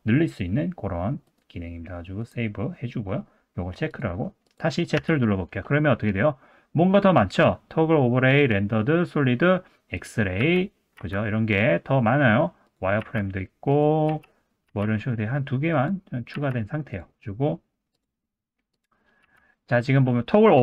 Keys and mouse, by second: 4.4 click, 5.0 z, 10.4 z, 11.0 z, 14.1 z, 18.0 click, 18.7 click, 19.2 z.